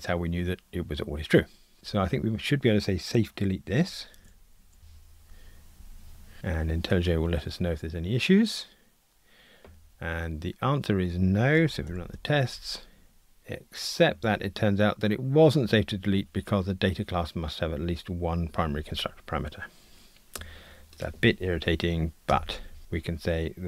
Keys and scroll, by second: 4.2 shift+super+a, 5.7 super+Delete, 11.9 ctrl+r.